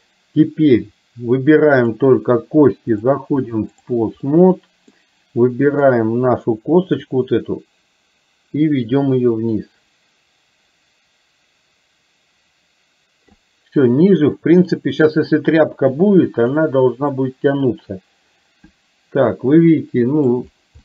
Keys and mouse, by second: 3.1 click, 4.3 middle click, 5.9 click, 7.7-13.8 drag, 16.4 click, 17.2-20.4 middle drag.